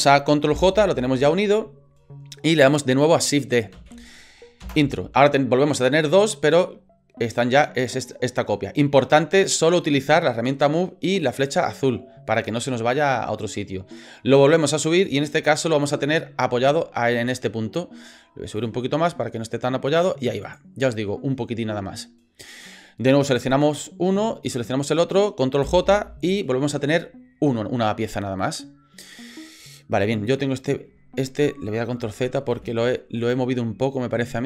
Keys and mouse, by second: 0.5 ctrl+j, 3.7 shift+d, 6.3-9.5 drag, 11.5-15.9 drag, 16.7 shift+middle click, 18.6-20.0 drag, 20.4 right click, 23.2 right click, 24.5 shift+right click, 25.6 ctrl+j, 32.0 ctrl+z, 32.6 ctrl+z, 33.2 right click.